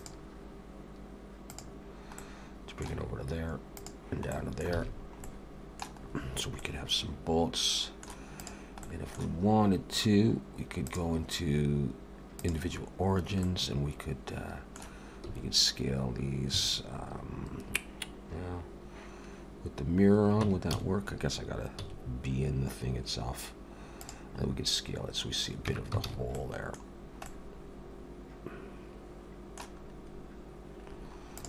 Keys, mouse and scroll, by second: 0.0 click, 2.2 middle click, 3.8 click, 4.3 middle click, 4.8 alt+a, 5.0 scroll down 3, 5.2 middle click, 5.9-6.6 scroll up 5, 6.6 middle click, 8.4 click, 8.8 middle click, 10.8 click, 13.4 middle click, 15.3 s, 20.4 Tab, 20.7 a, 21.8 s, 24.4-24.8 scroll up 1, 25.2-25.6 scroll down 1, 25.7 Tab, 25.7 scroll down 1, 26.1 alt+a, 26.3 middle click, 27.0 scroll down 2, 27.2 middle click, 29.9 scroll up 1, 30.9-31.4 scroll down 4, 31.3 click.